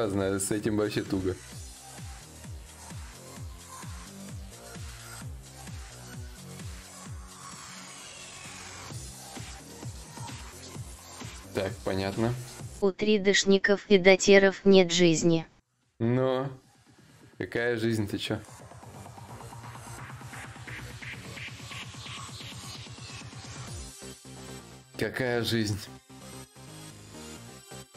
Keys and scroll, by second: 26.9 ctrl+s.